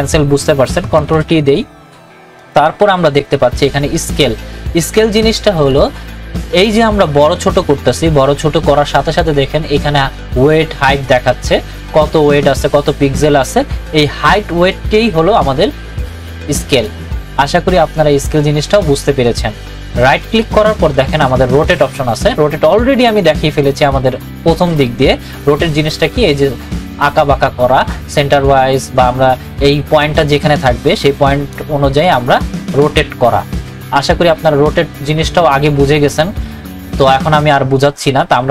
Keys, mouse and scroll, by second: 0.5 click, 1.1 ctrl+t, 2.4 right click, 5.6-16.7 drag, 20.1-22.2 drag, 22.2 right click, 23.0 click, 25.7-38.5 drag.